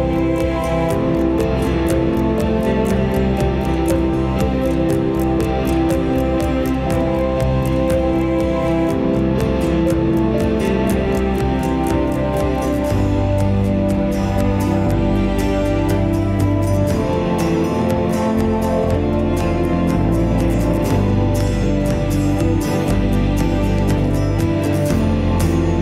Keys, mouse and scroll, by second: 2.1-2.5 middle drag, 2.8 Tab, 3.4 middle click, 6.3 click, 7.4 e, 12.0 click, 13.4 ctrl+b, 18.9 Tab, 19.2-20.6 right drag, 20.6 g, 23.9-25.8 middle drag.